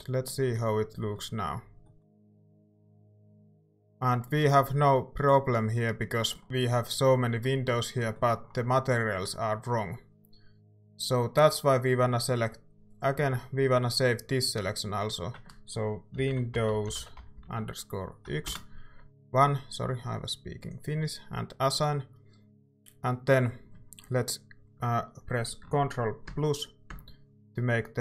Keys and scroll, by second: 6.4 Tab, 16.0-18.3 typing, 18.5 Return, 23.2 typing.